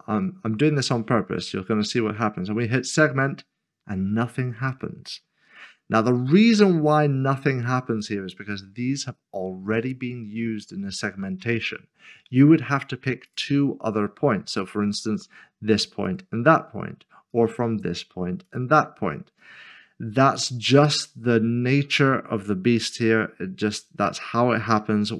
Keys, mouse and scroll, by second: 0.8 click, 13.3 click.